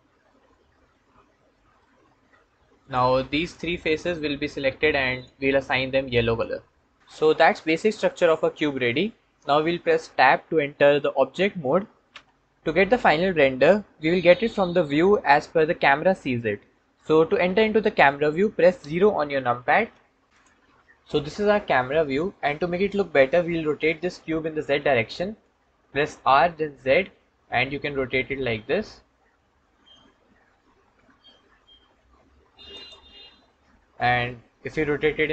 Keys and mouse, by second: 0.7 middle click, 2.7 click, 3.7 shift+click, 4.1-5.0 middle drag, 5.0-6.9 drag, 6.9 middle click, 7.4-8.5 drag, 8.5 middle click, 12.0 Tab, 19.7 KP_0, 25.3 r, 26.3 z, 33.9 r, 34.2 x.